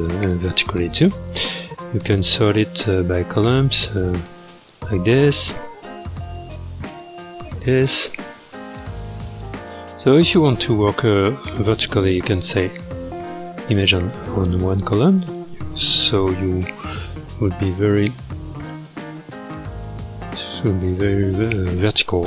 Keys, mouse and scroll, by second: 5.1-5.7 scroll down 1, 5.7-6.7 scroll down 4, 6.7-13.2 drag, 13.2-14.1 scroll up 9, 14.1-16.2 shift+middle drag, 16.2 t, 18.0-19.3 drag, 19.3-20.3 scroll up 7, 20.4-20.9 scroll down 5, 20.9-22.2 ctrl+middle drag.